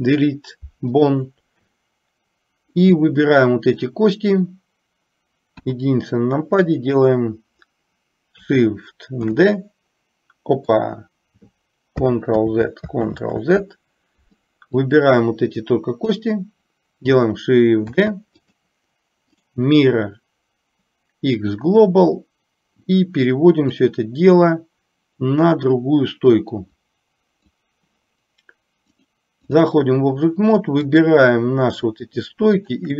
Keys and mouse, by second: 3.2 click, 5.7 KP_1, 9.4 shift+d, 12.5 ctrl+z, 15.0-16.4 drag, 18.0 shift+d, 21.1-23.8 right drag, 23.8-27.7 drag, 29.0 click, 31.1 click, 32.7 shift+click.